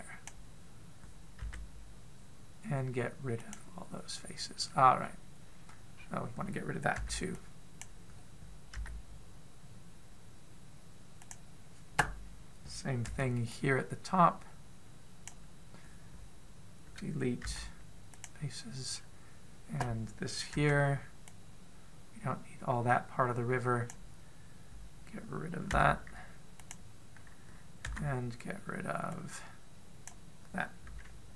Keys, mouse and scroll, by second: 2.2 x, 5.8-6.8 scroll down 1, 6.8-7.7 scroll down 2, 7.7-8.6 scroll down 1, 7.7 b, 9.5 x, 13.8 b, 18.2 x, 19.7-21.3 scroll up 1, 21.3-21.7 scroll up 1, 21.3 b, 26.5 x, 28.7 b.